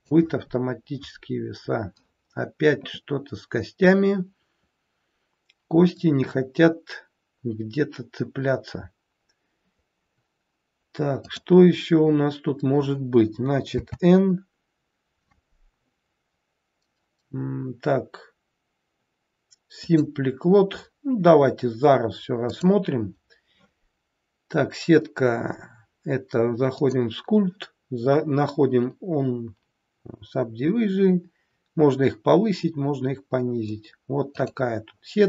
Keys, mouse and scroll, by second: 6.2-7.0 scroll up 2, 7.0-7.3 scroll down 1, 9.4-10.1 scroll up 1, 11.2 click, 13.7 n, 19.7 click, 22.5 click, 34.5 click.